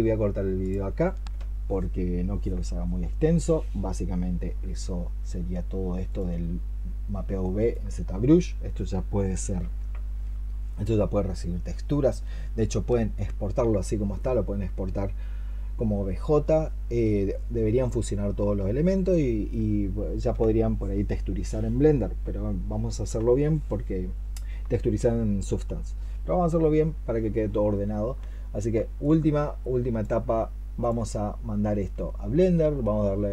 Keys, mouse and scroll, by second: 7.3 alt+click, 30.7 alt+click.